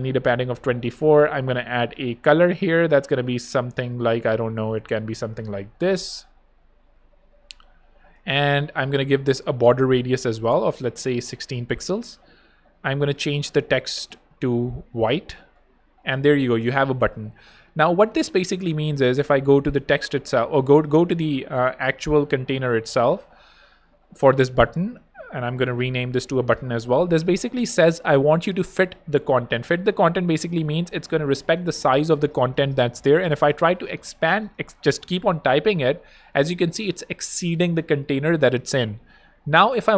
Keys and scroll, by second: 11.3 super+i, 11.5 6, 11.6 Home, 15.8 Escape, 25.7-26.8 typing, 31.2 Right, 31.3-35.5 typing, 35.7 Escape.